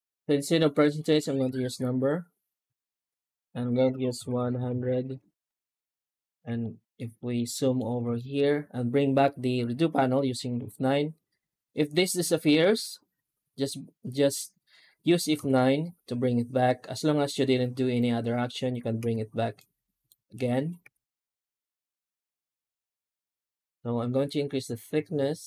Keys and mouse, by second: 4.4 KP_0, 5.8-6.2 middle drag, 6.5 shift+middle click, 7.0 middle drag, 7.7 alt+middle click, 8.0 shift+middle drag, 9.1-9.4 middle drag, 10.4 F9, 15.2 F9, 19.5 F9, 20.7 F9.